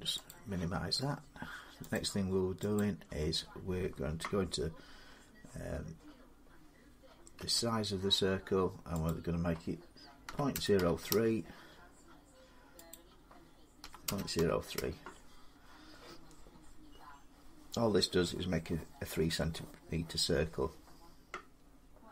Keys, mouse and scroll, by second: 0.1 click, 1.8 click, 2.6 click, 7.2 n, 8.9 click, 10.1-10.6 typing, 10.9 Return, 12.8 click, 13.7-14.6 typing, 16.3-17.3 scroll, 17.3-18.7 scroll up 18.